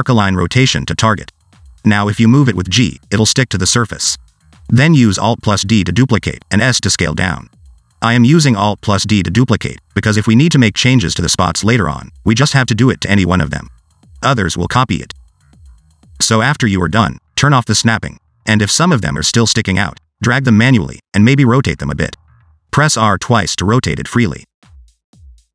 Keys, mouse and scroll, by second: 3.7 scroll down 2, 3.8 middle click, 4.1-4.5 scroll up 2, 4.6 g, 5.6 middle click, 7.0 alt+d, 8.0 s, 8.4 alt+d, 8.9 s, 9.2 alt+d, 9.5 s, 9.8 middle click, 10.0 alt+d, 10.6 s, 10.9 alt+d, 12.2 s, 12.7 middle click, 13.6 alt+d, 14.3-16.6 typing, 14.6 middle click, 14.8 alt+d, 15.3 middle click, 15.4 alt+d, 15.8 alt+d, 16.0 middle click, 16.2 alt+d, 16.4 middle click, 16.5 alt+d, 17.6 click, 19.2 g, 20.6 middle click, 20.9 r, 22.1 middle click, 22.3 middle click, 22.5 shift+middle click, 22.7 click, 22.9 r, 23.3 g, 24.1 middle click, 24.4 click, 24.6 middle click, 24.8 r, 25.4 g.